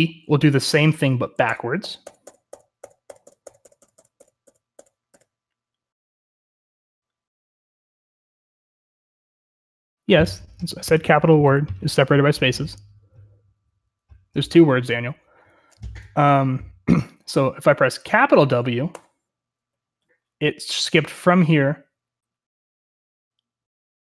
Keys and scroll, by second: 0.0-24.1 typing.